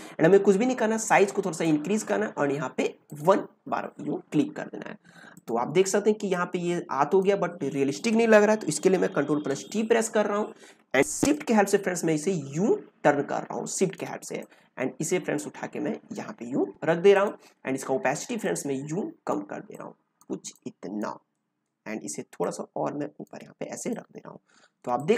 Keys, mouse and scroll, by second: 0.2-3.0 alt+right drag, 3.0 click, 5.3-9.3 drag, 9.3 ctrl+t, 11.3-23.7 shift+drag, 23.7 ctrl+space, 23.9 ctrl+click, 24.5 ctrl+space, 24.9 click.